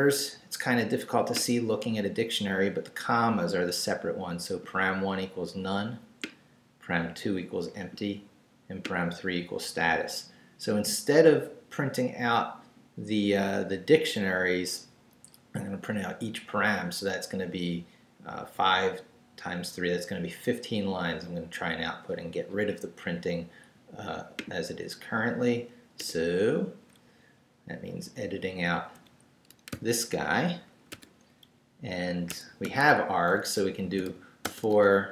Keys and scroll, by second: 26.0 Return, 27.0 Left, 28.9 Left, 29.7 i, 30.9 shift+3, 31.4 shift+Left, 32.1 Left, 32.3 Escape, 32.6-35.1 typing.